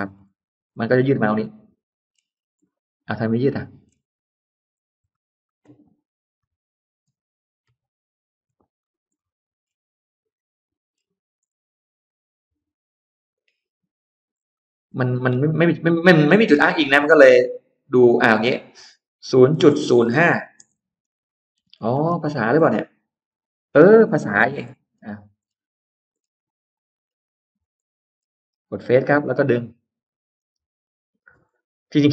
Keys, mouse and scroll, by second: 0.0-1.5 scroll up 3, 0.3 Escape, 1.3 middle click, 2.2 scroll up 1, 2.5-3.6 middle drag, 4.0 ctrl+middle click, 4.5 middle click, 5.0 ctrl+z, 5.7 ctrl+z, 7.5 ctrl+y, 8.1 ctrl+y, 9.0 middle click, 9.5-9.8 scroll down 1, 10.2 click, 10.5-10.9 scroll up 1, 10.5 middle click, 11.3 scroll up 1, 11.9 click, 13.2 click, 14.2 scroll down 1, 15.4 n, 19.1-22.5 typing, 23.1 Return, 23.7 space, 24.2 Escape, 24.2-25.6 scroll down 3, 24.5 middle click, 25.6-26.3 scroll up 1, 26.4-27.1 scroll down 2, 27.5 click, 27.9-28.3 scroll up 1, 28.5 click, 29.9 click.